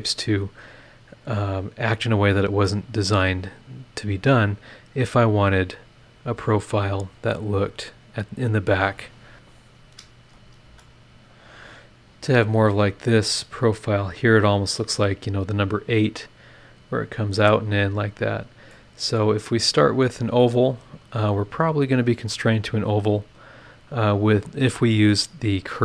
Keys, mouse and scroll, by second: 0.1 scroll up 2, 7.4 click, 8.2 click, 9.6 click, 10.2 space, 11.4 click, 11.7-13.8 middle drag, 18.1 scroll down 2, 18.7 click, 19.4 click, 20.4-21.5 drag, 20.5-21.5 right drag, 25.2 scroll down 2, 25.7 scroll down 2.